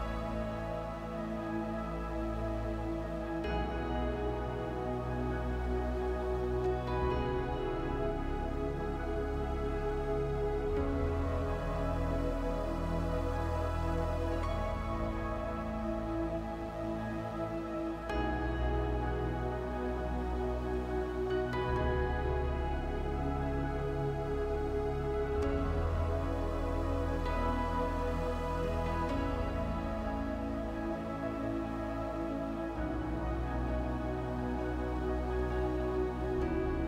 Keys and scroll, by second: 16.8 space.